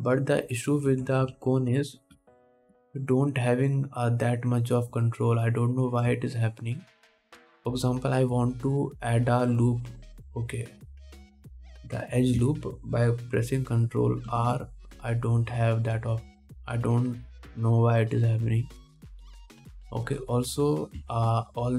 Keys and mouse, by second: 2.1 Tab, 2.5 alt+a, 3.7 ctrl+r, 5.1-21.7 drag, 5.1 middle click, 5.1 right click, 15.5 ctrl+r.